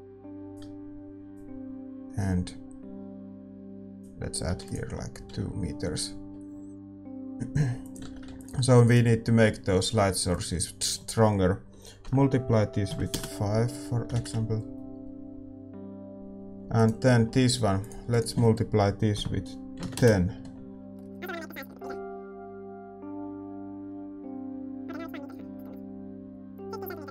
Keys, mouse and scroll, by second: 8.0-14.9 drag, 8.0 shift+z, 8.8 ctrl+s, 8.8-14.9 right drag, 8.8 shift+z, 16.5 ctrl+s, 16.5 click, 16.7-20.8 middle drag, 16.7-20.8 right drag, 23.8-25.8 drag, 26.9-27.1 drag.